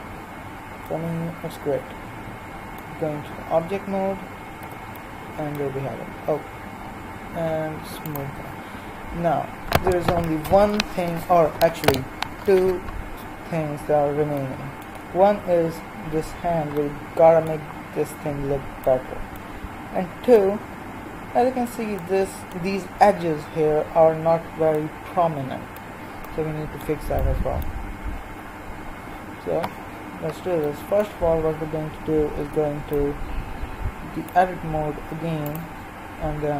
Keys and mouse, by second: 3.6 Tab, 4.5 z, 8.0-14.8 drag, 17.2-27.4 middle drag, 32.3 Tab, 35.7-36.5 drag.